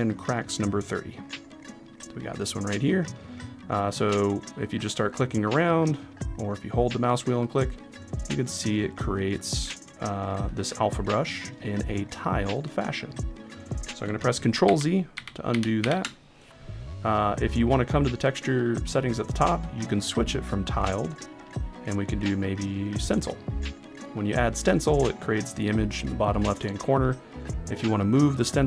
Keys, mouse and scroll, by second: 4.8 click, 5.3 click, 5.7 click, 6.5 click, 14.6 ctrl+z, 15.1 ctrl+z, 18.6-23.6 drag.